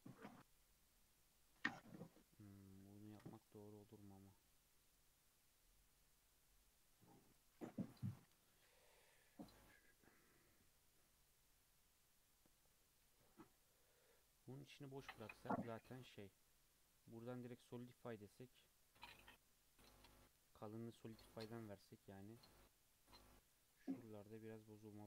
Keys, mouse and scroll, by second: 0.3 scroll down 1, 0.5-3.1 middle drag, 3.1 ctrl+r, 7.8 KP_3, 9.0-12.1 scroll down 3, 12.8 Tab, 13.1 alt+z, 14.4-15.0 scroll down 2, 15.0-17.2 middle drag, 17.2-19.6 drag, 19.6-21.6 middle drag, 21.6-23.4 drag, 23.4-23.9 scroll up 3, 24.1-24.6 scroll down 1, 24.7 middle click.